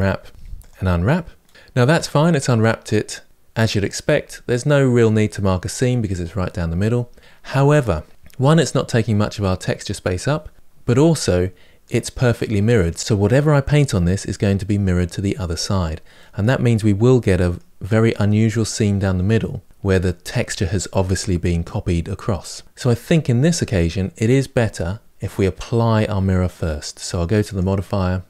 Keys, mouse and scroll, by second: 2.6-16.4 middle drag, 16.4-17.0 scroll up 3, 17.0-22.6 middle drag, 22.6-24.3 scroll down 2, 24.3 scroll down 1, 24.4 Tab.